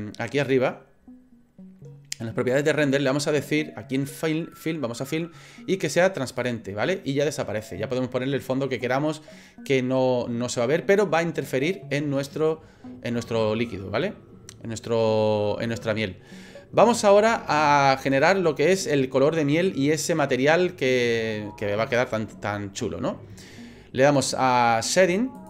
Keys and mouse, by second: 0.4 click, 4.6 click, 6.3 click, 17.4 shift+middle click, 18.2 middle click, 18.4 click, 18.5 middle click, 18.6 click, 18.7 middle click.